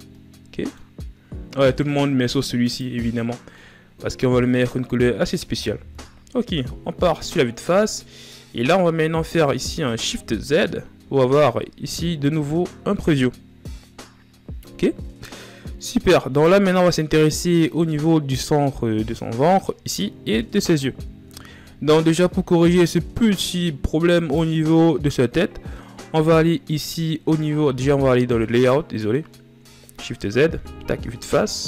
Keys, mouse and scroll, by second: 2.3-2.7 right drag, 2.7-3.2 shift+scroll up 5, 3.2-5.6 middle drag, 5.6 KP_1, 6.7-7.1 scroll down 2, 7.4-8.3 shift+scroll down 3, 8.3-8.9 shift+scroll up 2, 8.9 shift+z, 9.8 shift+z, 18.7 shift+scroll down 1, 21.0 shift+z, 21.4-22.4 shift+scroll up 11, 22.4-23.3 ctrl+scroll down 8, 23.3-23.8 scroll up 2, 23.8-28.3 right drag, 28.3 click, 29.5 shift+z, 30.2 KP_1.